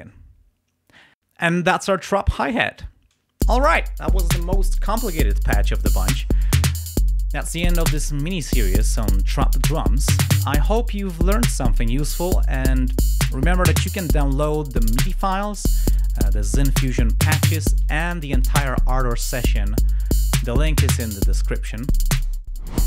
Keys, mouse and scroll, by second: 2.9 space, 3.3 l.